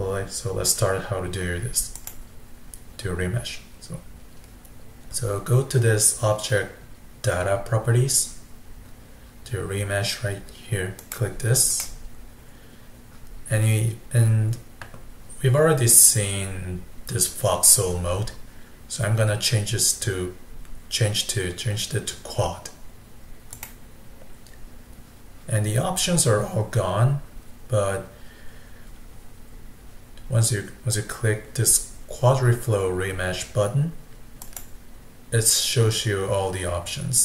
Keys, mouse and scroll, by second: 2.0 click, 11.0-14.8 drag, 23.6 click, 34.4-37.2 drag.